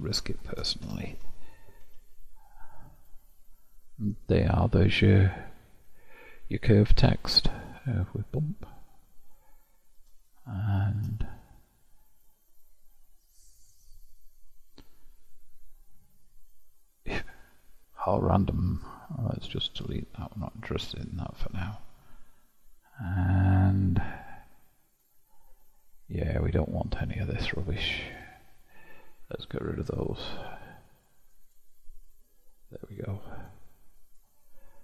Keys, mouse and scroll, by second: 0.9 Tab, 1.9 KP_Divide, 2.4-3.0 scroll down 1, 3.0-3.8 drag, 3.8-4.3 scroll up 1, 4.3-5.8 middle drag, 5.8-6.7 scroll up 1, 6.7-7.4 middle drag, 7.4 click, 8.7-10.4 drag, 11.9-13.4 scroll down 6, 13.4-14.4 scroll up 1, 14.4-15.3 scroll up 1, 15.3-17.9 middle drag, 18.6 click, 20.4 click, 24.9 click, 28.2-33.3 drag, 33.3-34.1 middle drag, 34.1 click.